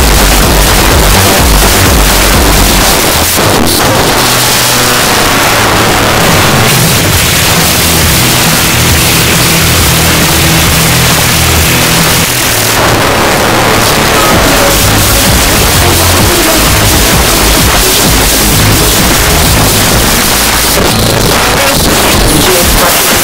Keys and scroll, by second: 2.9 Page_Down, 12.2 Page_Down, 20.2 Page_Down.